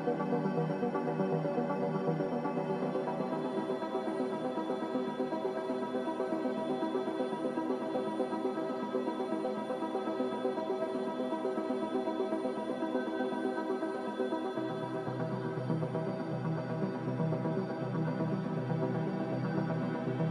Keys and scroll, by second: 0.9 z, 4.0 5, 4.4 Return, 9.8 ctrl+z, 14.7 a, 16.9 2.